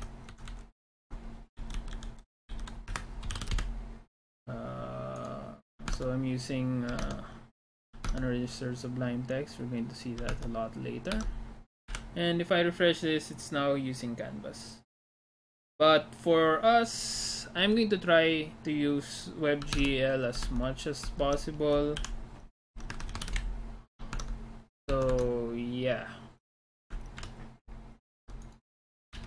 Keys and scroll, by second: 0.0 Left, 0.3 Right, 0.5 Right, 1.4-4.1 typing, 5.9 alt+Tab, 7.1 alt+Tab, 8.2 alt+Tab, 10.4 alt+Tab, 11.3 alt+Tab, 20.5 alt+Tab, 21.2 alt+Tab, 22.0 u, 23.0 Escape, 23.4 Return, 23.4 typing, 24.3 alt+Tab, 24.9 alt+Tab, 25.2 alt+Tab, 27.2 ctrl+=.